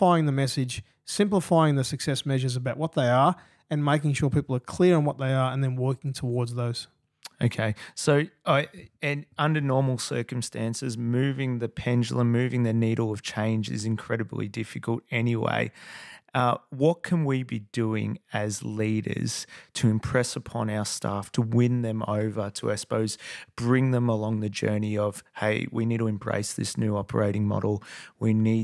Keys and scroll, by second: 11.5 F8, 24.6 super+], 24.8 super+], 27.4 super+Tab.